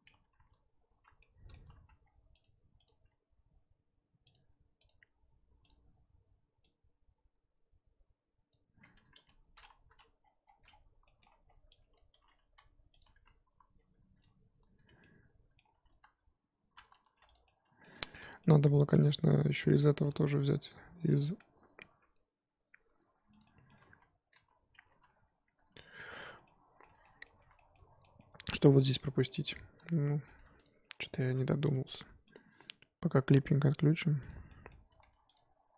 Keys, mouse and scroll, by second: 0.1 Tab, 0.9 alt+h, 1.1 scroll down 1, 1.2-1.8 middle drag, 1.8 z, 2.0-2.4 scroll down 2, 2.4 click, 2.8 click, 5.7-8.9 drag, 8.9 Tab, 9.2 a, 9.5-9.9 scroll down 4, 9.9 KP_1, 11.9 click, 12.2 g, 13.0 Tab, 13.5 z, 13.7-14.8 scroll up 4, 14.8 Tab, 15.0 scroll up 1, 15.0 middle click, 15.9 3, 17.3 click, 17.4-18.2 middle drag, 18.2 z, 18.4-21.9 middle drag, 21.9 e, 23.5-23.9 middle drag, 23.9 ctrl+z, 24.4 z, 25.1 scroll up 1, 25.5 Tab, 26.2 scroll down 2, 26.5-27.3 middle drag, 27.3 z, 27.5-30.6 middle drag, 30.6 shift+click, 31.2 shift+h, 31.7 click, 32.3 click, 34.2 click, 34.5 middle drag, 34.7 Tab, 35.3 click.